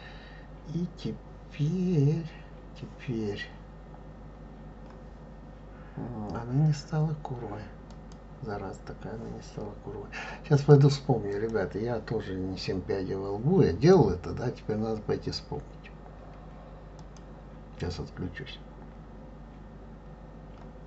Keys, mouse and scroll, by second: 7.9 click, 10.6 click, 11.3 click.